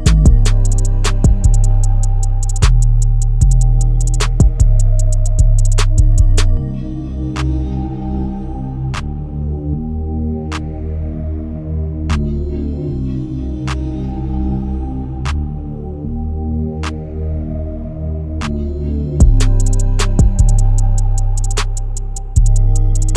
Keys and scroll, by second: 4.8 alt+Delete, 4.8 ctrl+d.